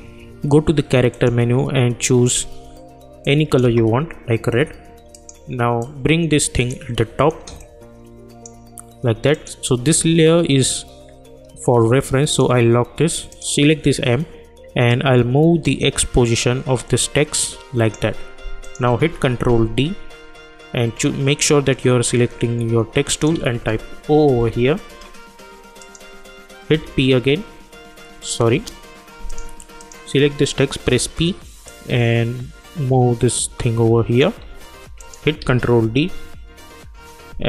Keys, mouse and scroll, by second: 1.1 click, 3.6 Return, 5.1-9.3 drag, 12.3-18.6 drag, 19.0 ctrl+d, 23.1 click, 23.3 ctrl+a, 24.3 shift+o, 25.8 click, 26.7 p, 29.3 click, 30.8 p, 31.7-35.0 drag, 35.4 ctrl+d.